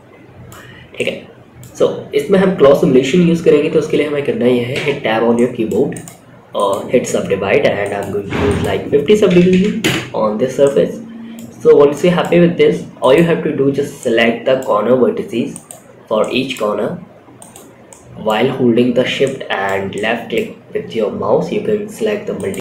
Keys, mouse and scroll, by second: 0.0 scroll up 2, 0.2-0.9 middle drag, 4.1 Tab, 4.6 middle click, 5.2 right click, 7.3 drag, 7.3 middle click, 7.3 right click, 7.8-9.2 drag, 9.9-10.8 middle drag, 10.9 scroll up 2, 11.2 middle click, 12.3 click, 13.3-13.9 shift+middle drag, 14.8 shift+click, 15.5 shift+middle click, 16.7 shift+click, 17.2 shift+middle click, 17.5 shift+click, 18.5 click, 18.5 middle click, 19.2 shift+click, 19.2 shift+middle click, 19.7 shift+scroll up 1, 21.7 shift+click, 22.1 shift+scroll down 3, 22.5 shift+middle click.